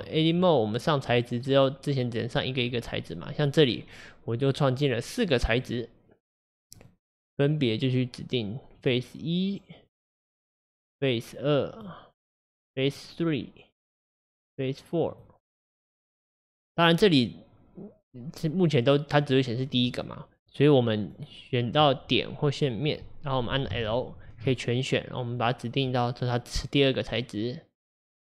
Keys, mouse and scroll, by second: 5.3-6.9 drag, 8.9-10.0 drag, 11.0-12.5 drag, 13.9 click, 16.0-19.4 drag, 21.1 click, 25.3 click, 26.0-28.1 drag.